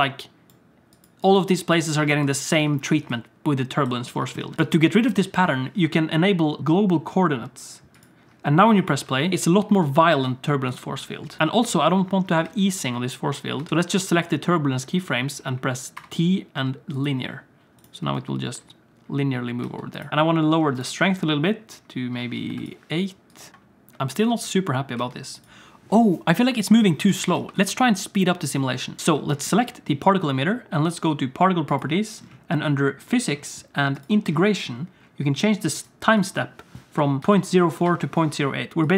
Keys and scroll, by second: 0.0-3.9 typing, 9.0 space, 10.2 space, 11.4 space, 12.4 space, 13.6 space, 13.7 alt+a, 16.0 t, 18.0 space, 19.6 space, 20.1 space, 23.5 space, 25.0 space, 27.1 alt+a, 27.4 ctrl+s.